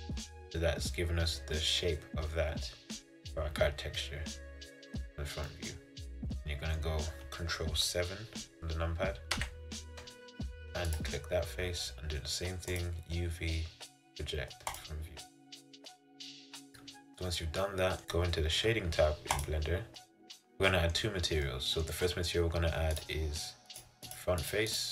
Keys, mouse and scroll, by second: 5.6-9.4 middle drag, 9.4 ctrl+KP_7, 11.0-15.8 drag, 16.6-18.0 middle drag, 18.0 Tab, 20.0 click, 20.6-23.2 middle drag, 23.2-24.9 drag.